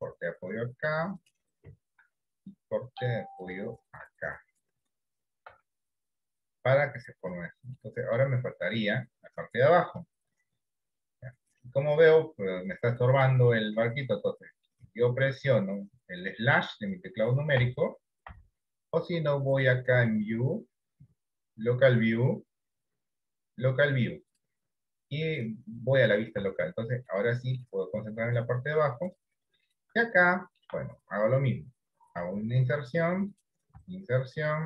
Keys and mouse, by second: 2.1 ctrl+r, 5.9 Tab, 8.0 middle click, 11.9-14.5 middle drag, 14.7 middle click, 15.1 shift+middle click, 17.7 KP_Divide, 18.5 KP_Divide, 20.3-24.5 drag, 25.4 middle click, 26.5 Tab, 27.2 middle click, 29.1 click, 30.2 shift+middle click, 33.4 i, 33.8 i.